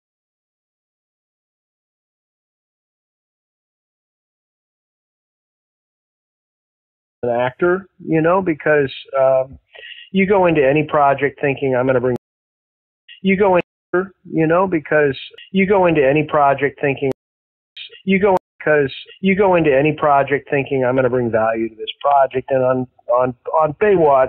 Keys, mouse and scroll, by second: 7.2 space, 7.9 click, 8.9 click, 10.8-12.1 drag, 12.1 space, 12.8 ctrl+shift+Delete, 13.0 space, 13.5 space, 13.7 click, 13.8 space, 15.0 click, 16.4 click, 17.0 space, 17.6 click, 17.6 space, 18.3 space, 18.4 click, 18.5 space, 19.8 ctrl+s, 21.8-23.3 drag, 23.6 click.